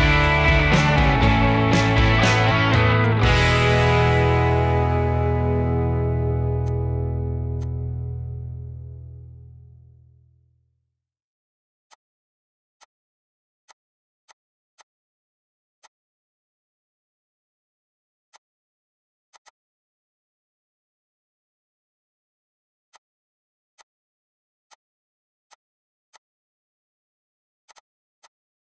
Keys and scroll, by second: 1.5 m, 3.4-4.0 typing, 6.5 p, 7.8 Escape, 10.0 Escape, 11.1 h, 15.4 m, 19.2-21.3 typing, 22.4 m, 26.3-28.0 typing.